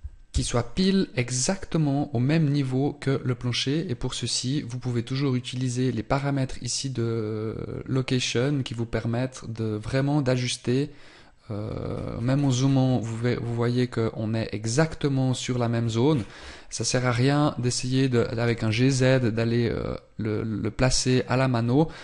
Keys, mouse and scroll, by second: 0.8 scroll up 1, 11.7 scroll up 1, 12.5 scroll down 1, 15.9 scroll down 1, 18.3 g.